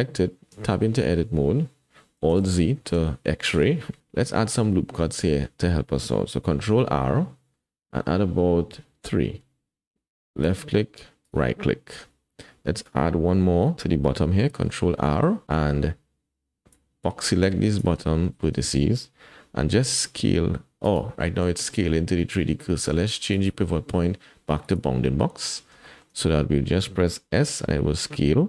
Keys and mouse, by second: 0.5 Tab, 2.3 alt+z, 2.8 shift+click, 6.5 ctrl+r, 14.6 ctrl+r, 16.7-17.8 drag, 18.2 shift+click, 18.2 shift+middle click, 18.4 shift+click, 21.4 shift+s, 21.6 shift+click, 23.4-24.7 drag, 25.9 shift+click, 27.5 s.